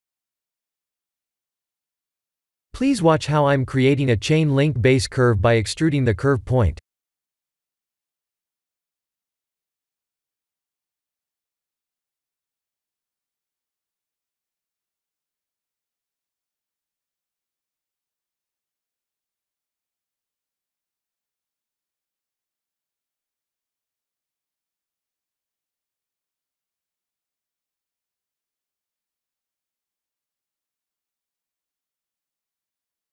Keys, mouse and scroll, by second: 0.7 g, 5.0 middle click, 5.5 middle click, 6.1-7.4 scroll up 6, 7.4 KP_7, 8.5-9.1 scroll up 1, 9.1-9.4 scroll up 1, 9.4 shift+middle click, 10.6-11.6 scroll up 1, 12.0 e, 15.0 KP_1, 17.6 g, 19.7 e, 21.6-22.2 scroll down 9, 23.0 e, 25.1 scroll down 3, 25.9 e, 28.6-30.2 scroll up 11, 30.0 middle click, 30.2 middle click, 30.6 middle click, 31.5 click, 32.6 middle click, 32.8 middle click.